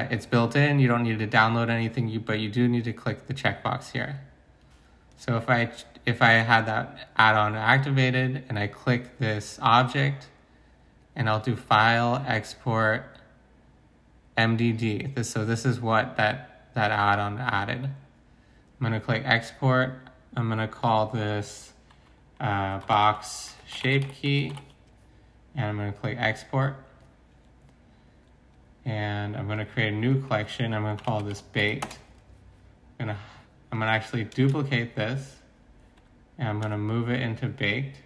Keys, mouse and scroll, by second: 22.8-24.5 typing, 31.0-31.6 typing, 31.8 Return, 34.2-35.5 typing, 36.6 m.